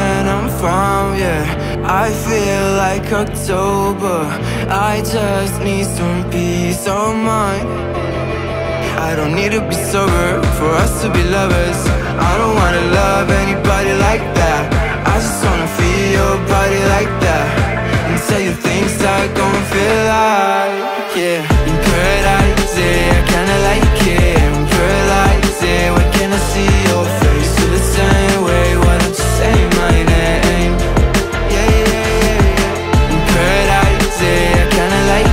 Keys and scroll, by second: 1.4 ctrl+z, 6.8 space, 10.4 2, 10.4 a, 10.5 2, 10.6 a, 11.0 Return, 13.1 ctrl+g, 14.3 ctrl+g, 15.0-15.4 typing, 15.7 Return, 16.5 space, 19.9 Up, 24.1 space, 26.5 space, 29.2 r, 32.3 shift+Up, 33.0 Escape, 33.9 alt+shift+Left, 34.2 alt+Right.